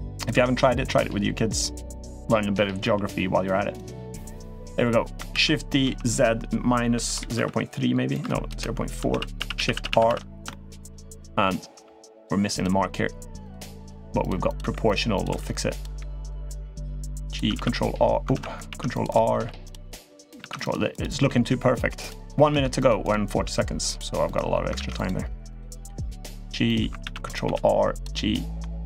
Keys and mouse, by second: 0.1 e, 2.6 l, 3.6 click, 5.1 shift+d, 8.9-9.9 shift+r, 10.2-10.6 middle drag, 10.8 middle click, 11.5 g, 12.4 g, 13.5 click, 13.6-16.6 typing, 14.2 click, 14.9 click, 16.5 click, 17.3 ctrl+t, 18.1 ctrl+z, 18.4 ctrl+r, 19.1 g, 20.2 ctrl+r, 21.0 g, 22.3 ctrl+r, 23.2 g, 24.0 click, 24.5 ctrl+r, 25.5 g, 26.4 click, 26.8 ctrl+r, 27.9-28.4 middle drag, 28.6-28.8 middle drag.